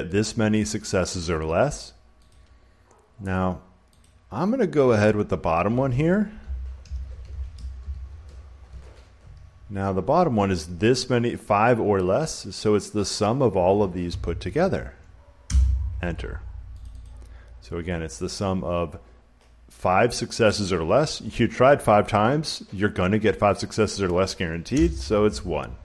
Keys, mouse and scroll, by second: 0.1 click, 0.6 click, 2.2 click, 3.9 click, 6.1-8.2 typing, 13.0-15.1 drag, 15.4 Return, 16.7 click, 16.9 click, 24.6 Return.